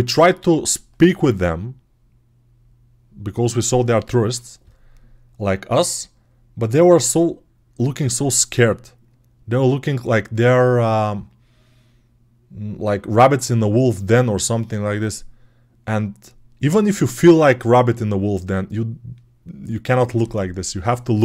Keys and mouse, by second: 3.7-21.2 drag.